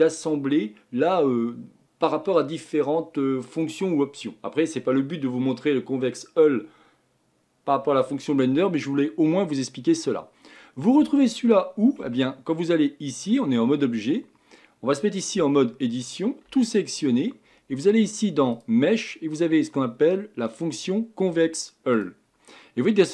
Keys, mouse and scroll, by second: 12.0 Tab, 12.6-15.4 middle drag, 15.4 Tab, 16.5 a, 18.5-21.7 drag, 22.6-23.1 middle drag.